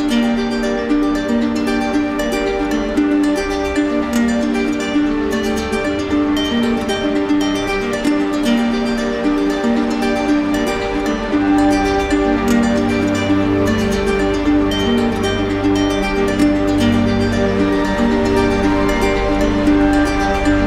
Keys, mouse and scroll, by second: 1.6 click, 2.2 click, 5.4 click, 7.0 click, 8.5 alt+click, 9.2 click, 10.9 click, 14.5 alt+click, 20.0 alt+click.